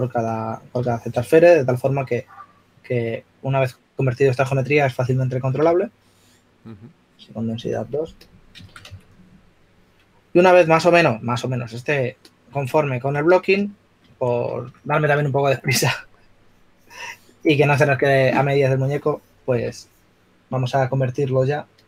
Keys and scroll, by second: 6.6 a, 10.2 a.